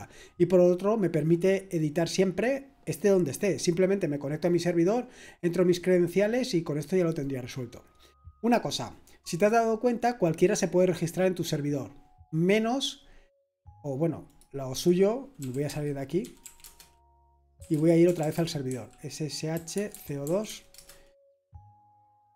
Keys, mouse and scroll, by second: 14.3 click, 14.8 click, 15.4-21.6 typing, 16.6 Return.